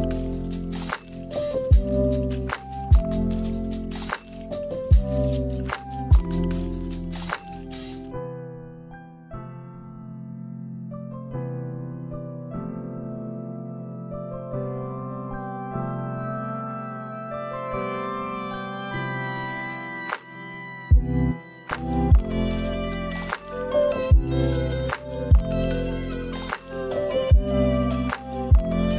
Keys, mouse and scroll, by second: 3.4 click, 9.5 click, 11.3 click, 12.3 Delete, 14.3 middle click, 14.8-15.3 scroll up 2, 15.5 click, 15.9 click, 19.2 click, 21.8 shift+a, 27.6 click.